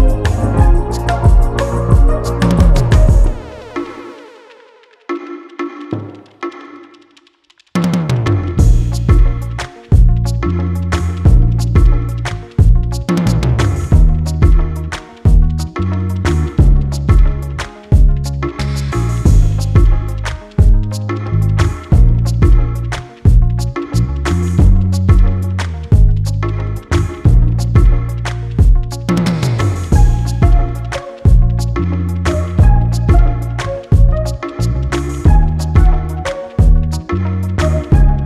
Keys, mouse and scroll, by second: 0.9-1.6 scroll up 2, 1.6 click, 2.4-3.6 middle drag, 3.6-4.1 scroll up 2, 4.1-6.6 middle drag, 6.6-8.6 drag, 9.4 scroll down 1, 9.7 middle click, 10.5-12.6 drag, 13.2 middle click, 14.2 click, 14.8 click, 15.9 middle click, 16.4 scroll down 1, 16.6 middle click, 17.0-17.7 scroll down 1, 17.7 middle click, 18.0-18.6 scroll up 1, 18.6-20.6 drag, 21.0-22.2 middle drag, 22.2 click, 22.7-23.5 scroll up 3, 23.5 click, 24.1 click, 24.6 scroll down 1, 24.8 middle click, 25.2 scroll down 3, 25.5-26.7 middle drag, 26.7-27.8 scroll down 3, 26.9 middle click, 27.8-29.1 drag, 30.0-32.1 drag, 32.7-33.5 scroll up 5, 33.5 click, 35.0 click, 35.8-37.6 middle drag, 37.6 click.